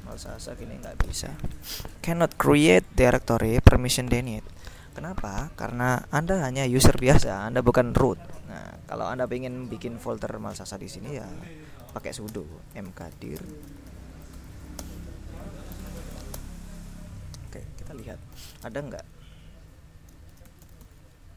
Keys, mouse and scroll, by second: 0.0-1.2 typing, 2.7 click, 3.6 click, 4.3-5.5 drag, 6.4 click, 8.4-10.3 drag, 11.7-16.9 typing, 18.1-19.1 typing, 20.1-21.3 typing.